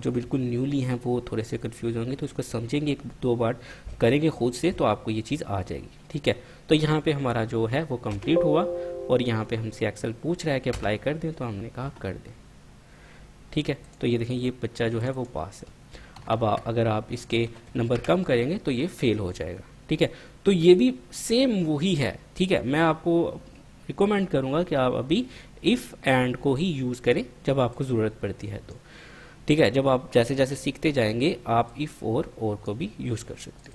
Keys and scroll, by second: 8.3 Return, 10.9 Return, 16.3 Home, 16.5 shift+End, 17.7 typing, 18.1 Return.